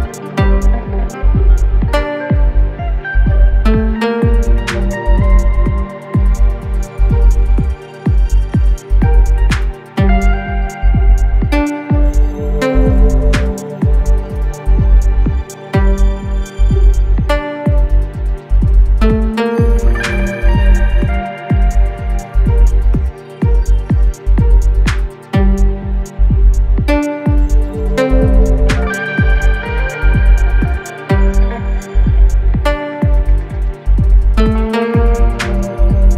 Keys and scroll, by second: 1.7 2, 6.9 ], 8.4 ctrl+d, 8.5 Escape, 13.6 ctrl+d, 13.7 Escape, 18.5 4, 20.4 3, 33.1 4, 35.1 3.